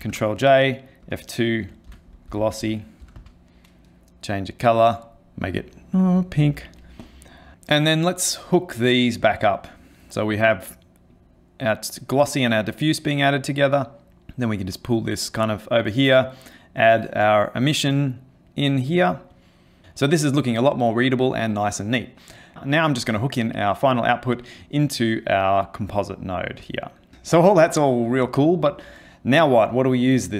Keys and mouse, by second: 0.0 ctrl+j, 1.0 F2, 2.6 s, 4.6 click, 5.1 click, 7.0 click, 9.0 click, 11.1 click, 12.8 middle click, 13.6 click, 14.1 click, 14.3 click, 16.8 click, 19.3 click, 22.8 click, 25.3 click, 26.7 click.